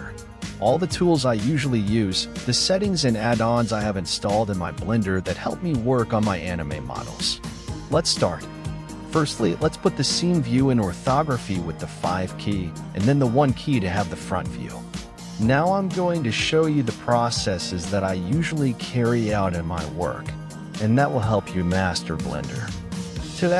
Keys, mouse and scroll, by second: 4.2 KP_5, 6.1 KP_1, 9.0 shift+a.